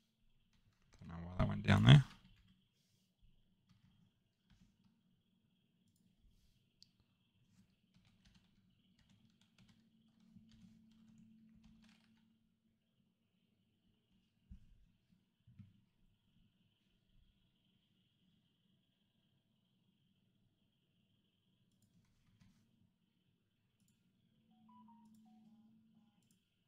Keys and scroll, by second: 0.9 Escape, 2.3 Delete, 3.6 Escape, 7.9-8.9 typing, 10.4-12.1 typing, 11.0 Tab, 13.8 Return, 17.6 Return, 22.3 Escape.